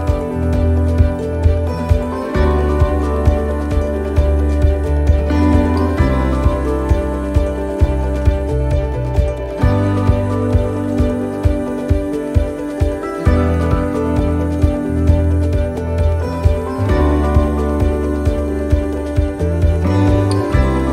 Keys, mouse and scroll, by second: 0.5 middle click, 6.1 middle click, 7.5-8.0 scroll up 2, 8.0 middle click, 9.7 middle click, 10.7-11.2 scroll down 1, 11.2 middle click, 13.5 scroll down 2, 14.0 middle click, 15.0-16.9 scroll up 1, 16.9 right click, 19.3-20.7 scroll down 3.